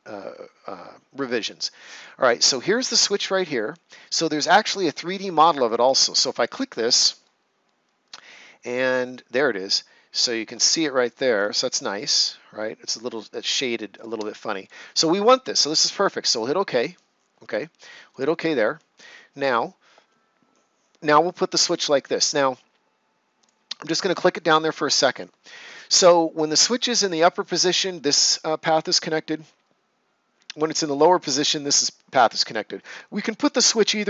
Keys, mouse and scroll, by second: 1.9 click, 5.6 click, 7.2 ctrl+right click, 14.5 click, 23.3 click, 24.0 right click.